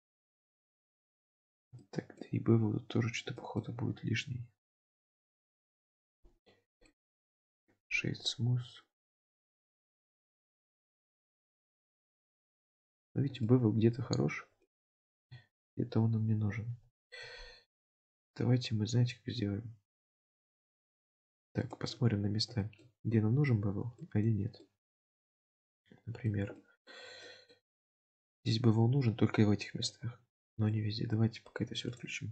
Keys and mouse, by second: 0.0 Tab, 0.5-1.6 middle drag, 1.8-2.3 shift+middle drag, 3.4 shift+middle click, 4.8 click, 6.9-12.7 right drag, 12.7 click, 13.5-14.7 shift+middle drag, 17.1 shift+middle click, 21.8 shift+middle click, 22.7 shift+middle click, 24.0 shift+middle click, 24.6 shift+middle drag, 25.2 shift+middle drag, 25.9-26.4 middle drag, 26.6-26.9 shift+middle drag, 27.3 shift+middle click, 30.4-30.8 shift+middle drag, 32.1 click.